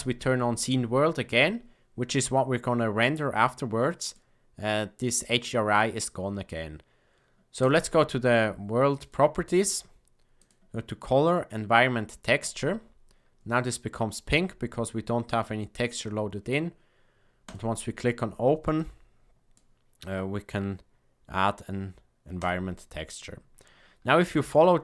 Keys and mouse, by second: 4.0-5.4 drag, 8.9 click, 10.3-12.4 drag.